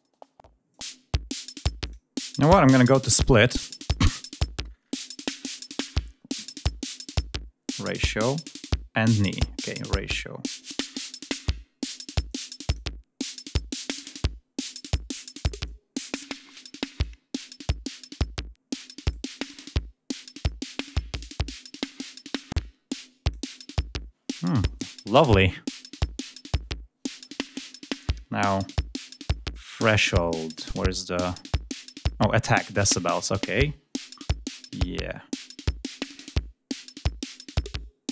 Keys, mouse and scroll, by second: 0.5 click, 1.6 click, 2.3 click, 12.1-12.8 drag, 13.1-14.2 drag, 14.6-15.2 drag, 15.5-16.5 drag, 16.8-17.4 drag, 17.7-19.1 drag, 19.2-20.4 drag, 20.7-21.8 drag, 21.9-23.0 drag, 34.6-35.9 drag, 36.0-37.0 drag, 37.3-38.1 drag.